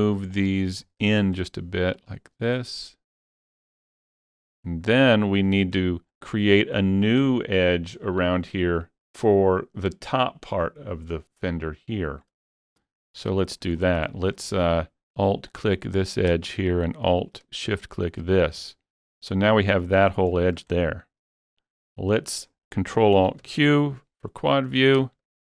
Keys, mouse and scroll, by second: 0.3 ctrl+click, 0.8 scroll up 1, 1.2 shift+middle click, 2.0-5.5 drag, 4.6-4.9 scroll down 1, 4.9 middle click, 5.5 scroll down 3, 5.8 middle click, 6.0 scroll down 1, 12.5 middle click, 12.5 scroll down 1, 12.7 shift+middle click, 13.4 shift+middle click, 13.8 scroll up 3, 14.1 shift+middle click, 15.5 alt+click, 18.7-20.0 middle drag, 20.0 scroll up 2, 21.1-22.7 shift+middle drag, 23.5 ctrl+alt+q, 24.5 scroll up 2, 24.8 scroll down 4, 25.2 shift+middle click.